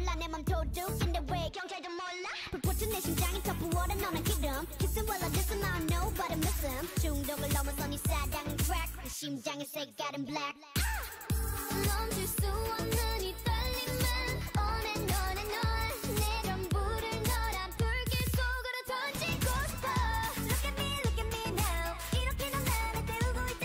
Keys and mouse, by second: 0.2 ctrl+z, 4.5 right click, 6.1 ctrl+e, 10.5 a, 10.7 k, 17.2-18.6 drag, 18.6 c, 19.4 click, 19.7 alt+m, 20.4 a, 20.6 c, 21.3 alt+m, 21.7 a, 21.8 c, 22.6 a, 22.6 c, 23.4 alt+m.